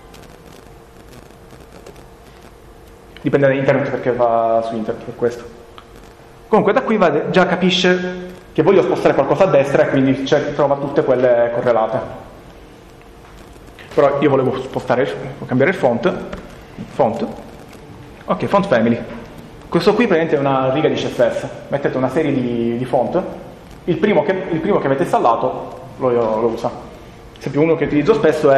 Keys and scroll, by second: 0.0-0.4 typing, 1.7 Return, 15.9-16.6 typing, 19.7 Home.